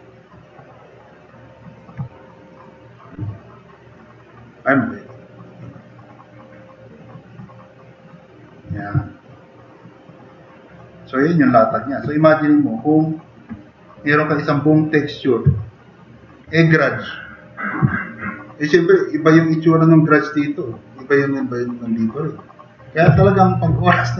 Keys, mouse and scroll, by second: 0.1-1.3 drag, 9.2 middle click, 10.4 middle click, 11.3 middle click, 11.9 middle click, 12.5 middle click, 15.6 middle click.